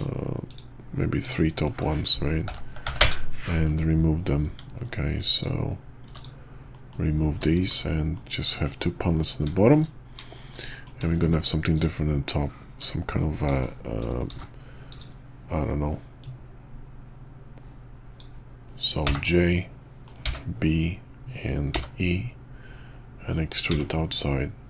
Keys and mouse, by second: 0.4 shift+click, 1.2 shift+click, 2.4 ctrl+l, 2.8 p, 4.5 Tab, 5.3 click, 6.0 x, 6.7 click, 7.6 shift+2, 8.1-8.6 drag, 9.1 click, 9.5 shift+drag, 10.2 click, 10.7 click, 11.1 shift+click, 11.7 click, 12.8-13.6 drag, 14.3 shift+v, 16.2-24.6 drag.